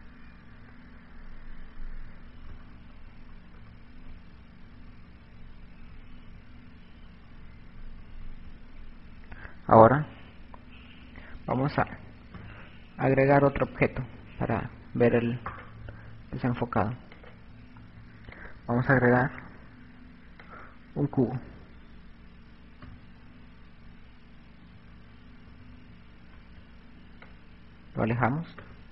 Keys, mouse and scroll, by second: 1.0 KP_2, 2.8-8.1 typing, 10.7 KP_6, 11.9 KP_6, 12.4 KP_7, 13.8 KP_Subtract, 14.1 KP_Subtract, 14.3 KP_Subtract, 14.5 KP_Subtract, 14.6 KP_Subtract, 15.3 right click, 17.3 click, 18.5 click, 21.3 KP_1, 23.8 KP_6, 25.2 KP_6, 26.8 click, 28.4 KP_0.